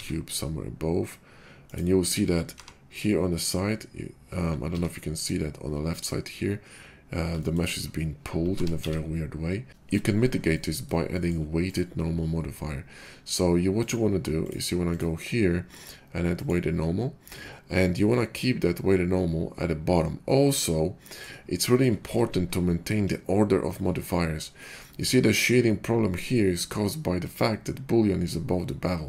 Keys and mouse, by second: 2.4 g, 7.2-7.6 shift+middle drag, 7.6-11.5 drag, 8.4 g, 11.5 middle click, 11.7-13.9 drag, 13.9-14.9 middle drag, 16.3-29.0 middle drag.